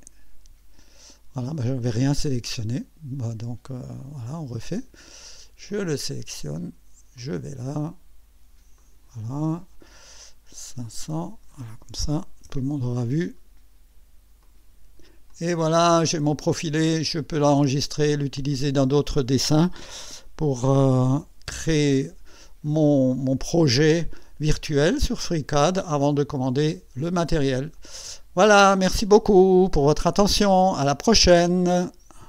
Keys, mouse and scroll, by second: 1.5 click, 3.9 click, 5.7 click, 7.2 click, 8.8 click, 10.8 click, 12.1 5, 12.5 0, 14.4 click, 15.3-16.8 drag, 16.9-17.2 scroll down 1, 17.9-18.6 right drag, 20.7-21.6 typing, 22.7-24.9 right drag, 25.3-27.0 right drag, 27.2 scroll up 1, 27.9-28.6 right drag.